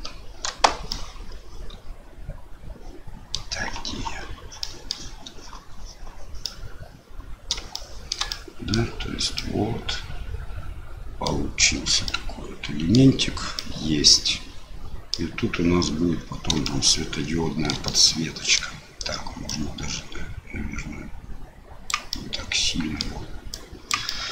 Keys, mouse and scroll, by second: 0.4 KP_Decimal, 1.0-3.4 middle drag, 4.7 middle click, 6.4-7.5 middle drag, 7.8 shift+middle click, 8.4 middle click, 9.4-11.3 middle drag, 12.2 middle click, 13.6-15.2 middle drag, 16.7-17.7 shift+middle drag, 18.0 middle click, 19.4-21.9 drag, 22.1 middle click, 23.5 click, 23.7 middle click, 24.2 middle click.